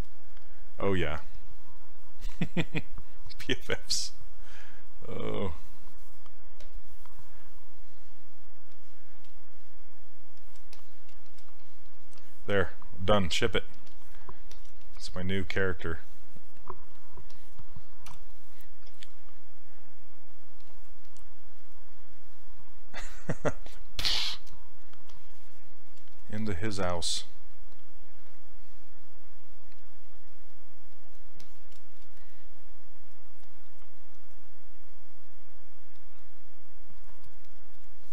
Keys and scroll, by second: 18.1 w.